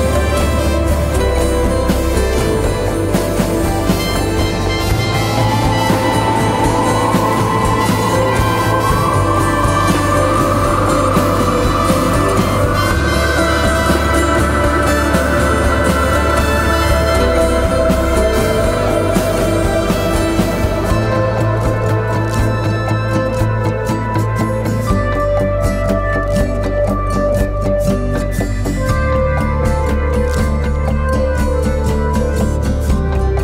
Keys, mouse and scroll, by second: 6.9 ctrl+t, 8.3 alt+shift+click, 12.2 alt+shift+click, 16.1 alt+shift+click, 18.8 Return.